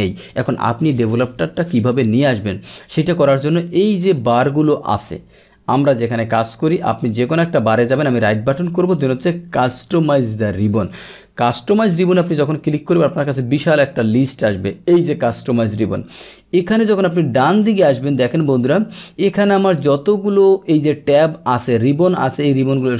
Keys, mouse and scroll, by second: 4.0 click, 5.7 click, 7.1 click, 7.8 right click, 10.7 click, 14.0 click, 16.8 click, 18.0 click, 19.1-20.1 drag.